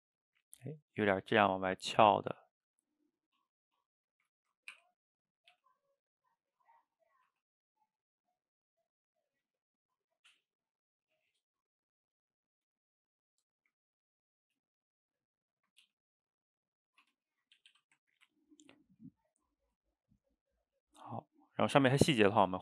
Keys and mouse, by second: 2.7-4.8 middle drag, 4.8 r, 5.6 g, 7.1 click, 7.3 g, 9.0 click, 9.3 g, 11.0 click, 11.2 g, 12.4-14.4 middle drag, 14.4 click, 14.7 shift+click, 15.6 shift+click, 15.8 g, 16.8 middle click, 17.0 Tab, 17.6 a, 17.7 a, 18.0-21.2 ctrl+middle drag, 21.9-22.6 middle drag.